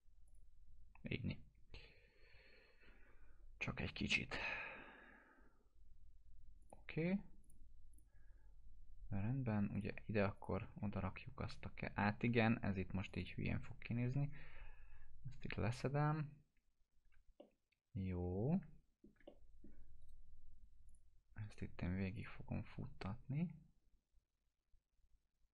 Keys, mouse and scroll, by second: 6.6 click, 10.3 shift+click, 10.9-12.5 alt+middle drag, 13.0 click, 14.0 ctrl+BackSpace, 17.1 ctrl+alt+BackSpace, 17.4-19.2 alt+middle drag, 20.0 right click, 20.9 click.